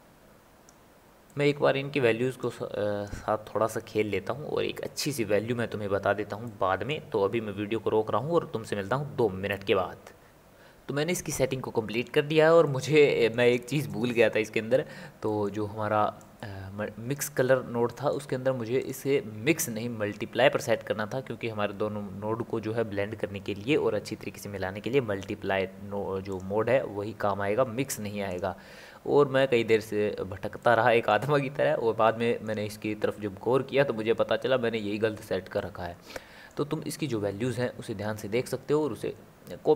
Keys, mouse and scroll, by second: 1.3-2.4 middle drag, 2.4-6.4 drag, 6.4-9.5 middle drag, 12.6-16.4 middle drag, 16.4 click, 17.9-18.8 middle drag, 18.8-28.5 drag, 30.6-35.2 middle drag, 35.6-37.2 middle drag, 37.2-39.7 scroll up 3.